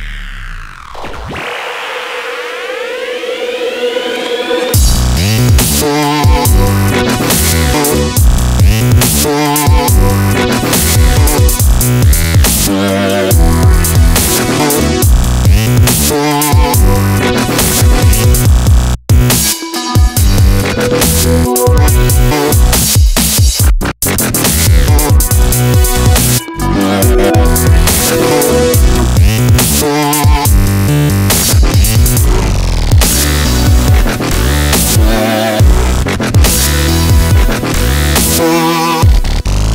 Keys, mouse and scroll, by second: 2.0-2.8 scroll up 1, 2.8-4.7 drag, 5.9 Tab, 6.7-8.5 middle drag, 8.5 KP_5, 8.9 KP_1, 9.8 middle click, 10.7 KP_1, 11.1 KP_1, 11.3-12.4 drag, 12.0 KP_3, 12.4 middle click, 17.9 a, 19.2-20.9 drag, 20.9 right click, 20.9 i, 23.7 i, 25.8 click, 27.0-28.8 drag, 30.4 a, 30.7-32.0 middle drag, 32.7-34.4 middle drag, 34.9-36.0 right drag, 36.3-37.3 drag, 36.6-37.8 right drag, 37.4 ctrl+b.